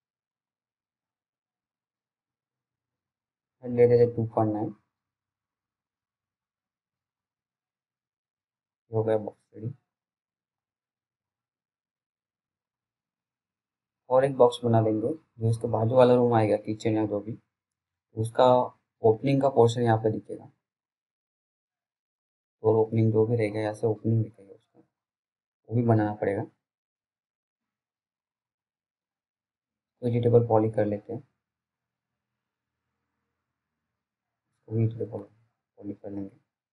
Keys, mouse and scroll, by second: 3.4 click, 6.0-6.4 scroll down 1, 6.8 middle click, 10.2 F3, 13.6 click, 14.0-15.9 scroll up 1, 15.9 click, 17.1-19.5 scroll up 1, 19.5 click, 20.0-21.1 scroll down 1, 21.7 right click, 22.0 click, 22.1 click, 22.4 alt+middle click, 23.4 p, 25.7 scroll down 1, 26.2 alt+middle click, 26.8-27.1 scroll up 1, 27.1 click, 27.9 right click, 31.0 click, 32.6 right click, 34.3 click, 35.2-36.5 scroll up 1, 36.5 click.